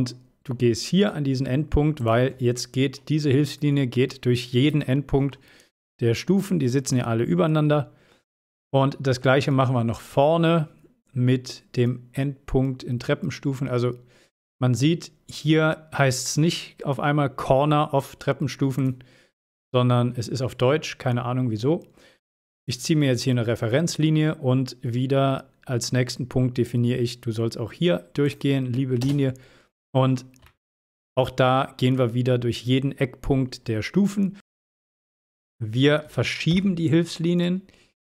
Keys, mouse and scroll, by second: 2.1 click, 2.6-2.9 scroll down 1, 4.9-5.5 shift+middle click, 5.5 shift+middle click, 6.0 scroll down 1, 7.0-8.3 shift+middle drag, 8.6-9.5 scroll up 1, 18.9 click, 22.7 click, 28.4 click, 29.1 space, 29.5 scroll down 1, 30.6-31.2 shift+middle click, 31.6-32.2 shift+middle click, 32.4-34.1 scroll down 1, 35.5 click, 36.6 m.